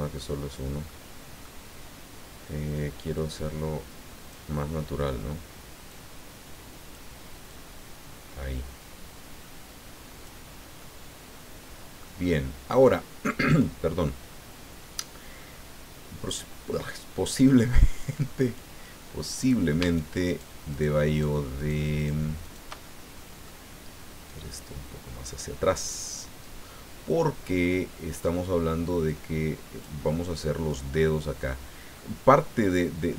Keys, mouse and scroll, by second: 0.9 middle click, 3.1-4.5 drag, 5.9-7.1 drag, 7.5-10.4 drag, 10.5 scroll down 1, 10.8-12.2 middle drag, 12.2 middle click, 14.0-15.1 middle drag, 15.4-17.0 middle drag, 18.0 click, 18.4 click, 19.4 right click, 19.9 shift+right click, 20.3 shift+right click, 20.7 shift+right click, 21.1 shift+right click, 21.6 shift+right click, 22.0 shift+right click, 22.4 shift+right click, 22.8 shift+middle click, 24.3-30.0 drag, 30.1 middle click, 31.4 middle click.